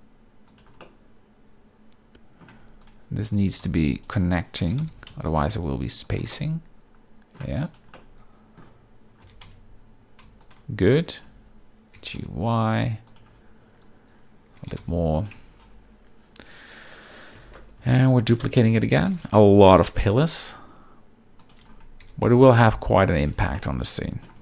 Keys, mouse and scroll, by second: 0.8-2.4 middle drag, 2.8 click, 3.3 g, 3.6 x, 4.6 g, 4.8 y, 6.3-7.4 middle drag, 7.6 click, 7.9-8.6 middle drag, 9.2 g, 9.4 x, 10.4 shift+click, 11.1 Tab, 11.9 g, 12.2 y, 13.1 click, 14.6 g, 14.8 y, 15.2 click, 15.4 Tab, 17.8 KP_7, 18.3 z, 19.1 shift+d, 19.4 r, 21.4 ctrl+click, 22.0 g, 23.3 z, 23.5-24.3 middle drag.